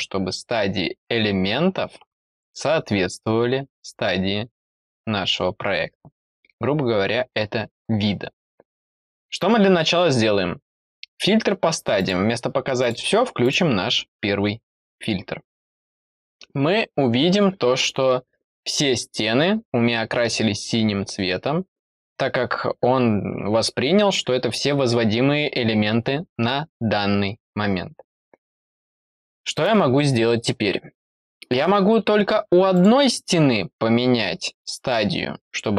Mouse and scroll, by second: 2.3 click, 3.0-3.3 scroll down 4, 11.9 click, 12.7 click, 13.3 click, 32.7 click.